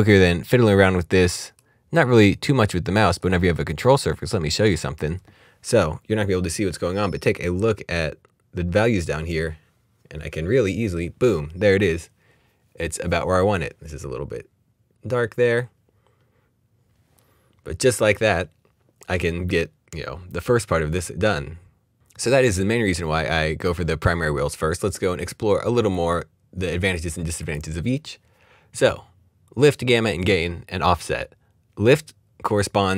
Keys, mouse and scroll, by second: 25.1 right click, 25.9 click, 32.6 click.